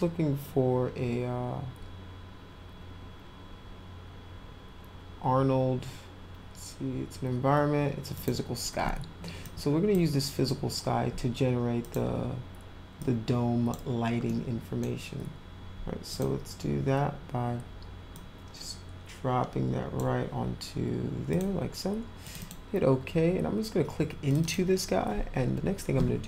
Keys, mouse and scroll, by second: 8.1 click, 9.4 click, 11.8 click, 13.0 click, 14.3-14.8 middle drag, 16.1 click, 18.1-19.9 drag, 21.3 click, 22.2 click, 22.4 click, 24.3 click, 24.4 click.